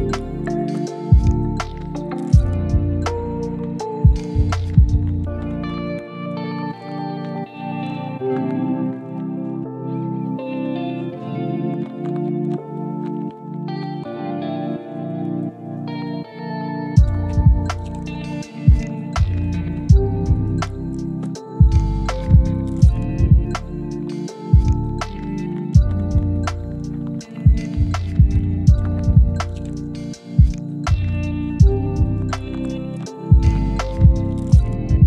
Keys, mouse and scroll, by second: 0.5 click, 0.7 g, 1.7 click, 1.9 g, 2.6 click, 2.8 g, 3.5 ctrl+z, 3.6 ctrl+z, 4.8 click, 5.4 g, 6.1 click, 6.5 click, 7.2 g, 7.9 click, 8.2 g, 9.0 click, 9.3 g, 10.1 click, 10.6 g, 11.2 click, 11.4 g, 12.0 click, 12.3 g, 13.7 click, 13.9 g, 14.5 click, 14.7 g, 15.5 click, 15.9 click, 16.1 g, 16.8 click, 17.1 g, 18.2 click, 18.5 g, 20.1 click, 20.4 g, 22.1 click, 22.5 g, 23.4 click, 23.6 g, 24.8 click, 25.0 g, 25.5 click, 25.8 g, 26.5 click, 26.7 g, 29.2 click, 29.5 g, 30.1 drag, 30.4 g, 31.3 drag, 31.6 g, 32.5 click, 32.8 g, 33.7 click, 33.9 g, 34.6 click, 34.8 g.